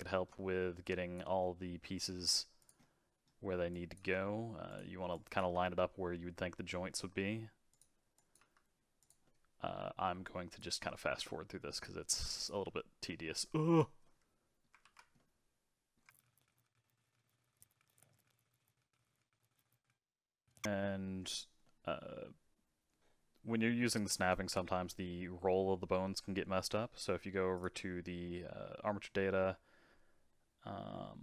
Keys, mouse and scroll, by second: 0.0 shift+middle click, 0.8 click, 1.4 middle click, 2.1 g, 2.8 middle click, 3.7 click, 4.0 g, 5.1 click, 5.4 g, 8.1 click, 8.4 g, 9.2-10.2 middle drag, 10.2 click, 10.6 g, 12.1 click, 12.5 g, 14.0 middle click, 14.8 ctrl+z, 15.2 middle click, 16.1 ctrl+z, 16.1 ctrl+z, 16.1 middle click, 16.3 click, 16.3-19.7 typing, 16.4 middle click, 16.5 click, 16.6 middle click, 16.8 click, 17.0 click, 17.1 middle click, 17.2 click, 17.3 click, 17.5 click, 17.6 click, 17.8 middle click, 17.9 shift+middle click, 18.2 middle click, 18.3 click, 18.8 middle click, 19.0 click, 19.2 middle click, 19.3 click, 19.8 middle click, 21.6-24.6 middle drag, 27.5 click.